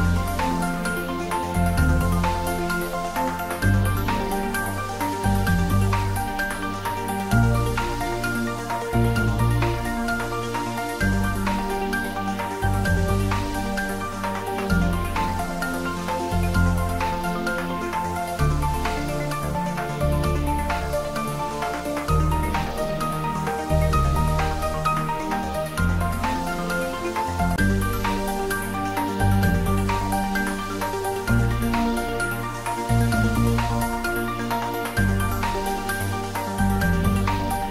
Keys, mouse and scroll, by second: 0.4 s, 1.9 click, 3.1 s, 3.9 click, 4.4 g, 11.2 click, 12.1-13.6 middle drag, 20.7-22.7 scroll down 2, 22.7 click, 23.4 scroll up 1, 24.8 s, 27.4 y, 28.9 click, 29.6 g, 29.9 y.